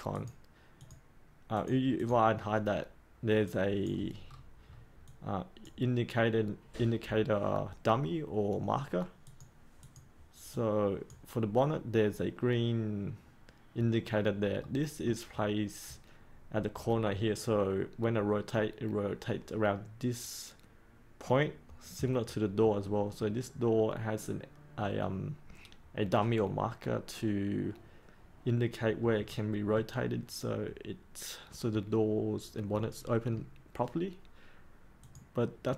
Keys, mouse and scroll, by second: 4.2-5.0 scroll up 1, 5.0-11.7 drag, 13.9-14.6 scroll up 1, 14.6 middle click, 15.3-15.8 scroll down 2, 22.2-23.9 middle drag, 34.9-35.7 drag.